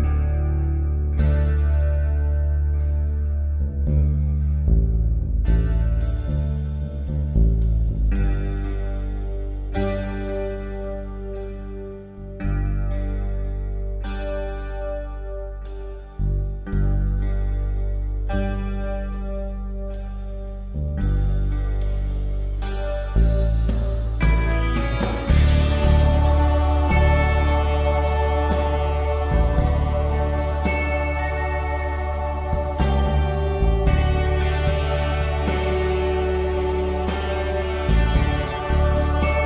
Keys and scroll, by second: 0.0-3.4 typing, 1.8 ctrl+alt+z, 4.6 space, 5.3 ctrl+z, 5.6-11.3 typing, 8.8 ctrl+z, 10.5 ctrl+z, 12.4 space, 13.7-15.5 typing, 14.8 ctrl+z, 25.0 Delete, 25.6 ctrl+z, 30.0 space, 35.7 p.